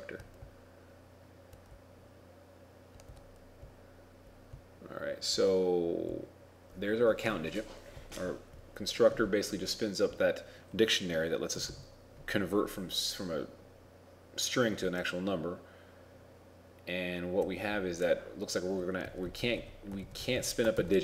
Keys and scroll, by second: 20.1 ctrl+Right, 20.4 ctrl+Right.